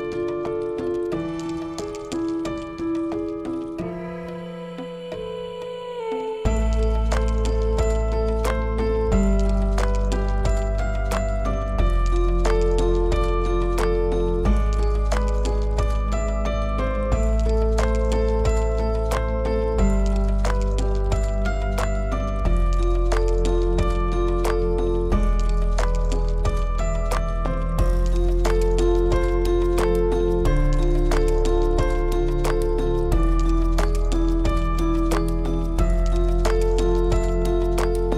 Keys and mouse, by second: 0.1 click, 2.0 click, 2.8 click, 4.3 middle click, 5.6 drag, 6.5 click, 7.2 Tab, 8.0 click, 8.8 l, 9.7 l, 11.8-12.3 drag, 12.8-16.3 drag, 16.7 click, 18.2-20.3 drag, 22.5 Tab, 23.2 click, 23.9 l, 25.3 l, 26.1-26.8 drag, 29.5 click, 31.2 click, 32.3-32.7 drag, 33.2-35.9 drag, 37.9 click.